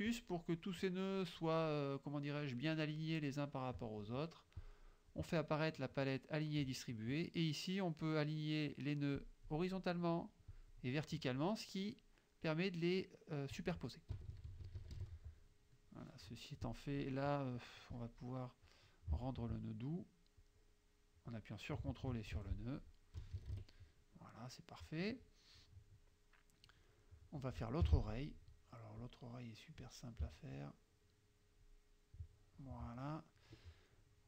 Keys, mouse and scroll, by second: 0.2 click, 4.7 click, 9.3 click, 10.6 click, 14.2 KP_Subtract, 15.9 click, 16.7 click, 17.0 click, 17.9 click, 19.3 ctrl+click, 20.4-21.5 drag, 22.4 ctrl+F1, 23.2 KP_Subtract, 24.4-25.7 scroll up 1, 26.9-27.3 scroll up 1, 27.3 click, 27.9 F6, 29.1 click, 30.7-31.9 shift+drag, 32.2 shift+click.